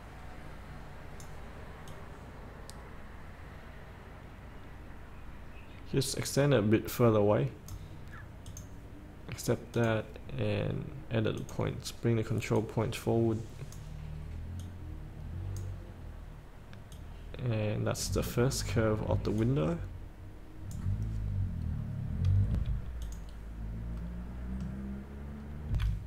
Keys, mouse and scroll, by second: 19.7-21.3 drag, 21.4 scroll up 1, 22.7 F8, 23.2 click, 23.8-24.1 scroll up 1, 24.1 middle click, 25.1-25.4 scroll up 2, 25.4 scroll down 1, 25.9 F8.